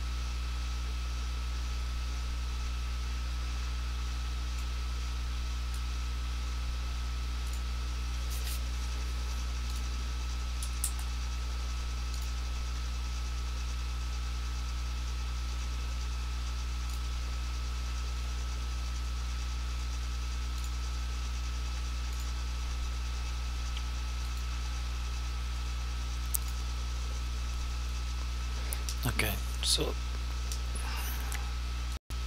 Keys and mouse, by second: 4.8 click, 7.6 click, 12.3 click, 17.0 click, 20.7 click, 32.0 click.